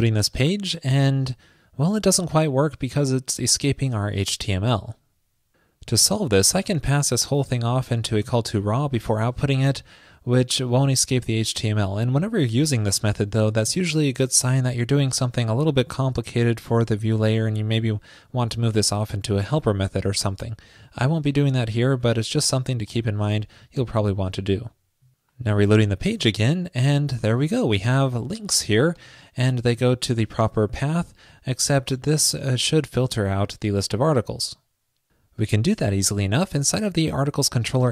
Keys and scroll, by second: 13.3 alt+shift+Left.